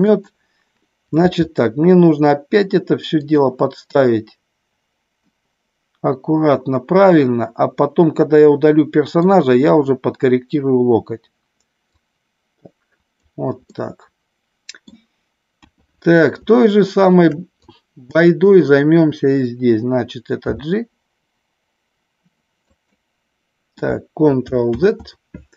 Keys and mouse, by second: 0.1 click, 1.2 g, 3.1 click, 5.3-9.3 middle drag, 11.9-13.1 drag, 13.8-15.0 middle drag, 15.6 KP_1, 16.5 shift+middle click, 17.6 click, 20.4 g, 22.7 click, 24.7 ctrl+z.